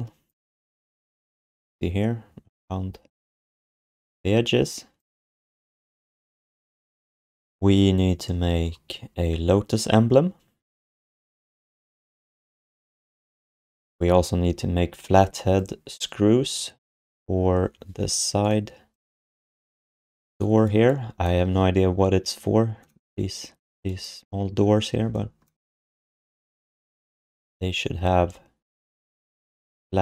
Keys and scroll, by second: 20.0 f.